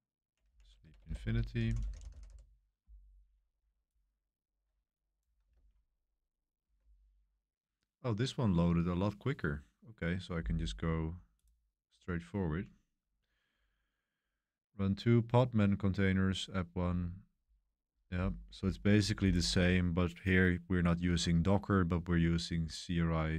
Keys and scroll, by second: 0.0-2.7 typing, 0.2 Right, 4.0-4.7 typing, 5.5 super+1, 5.7 super+1.